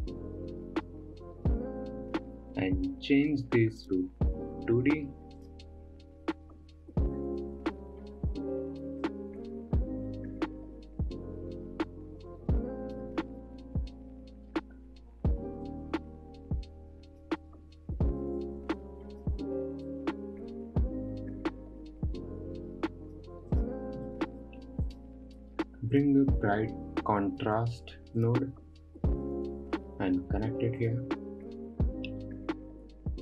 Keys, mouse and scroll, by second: 4.3-7.4 drag, 9.4-12.6 drag, 16.1-23.4 drag, 24.0 click, 24.5-25.3 middle drag, 25.3 click, 25.8 shift+a, 32.3-33.2 scroll up 5.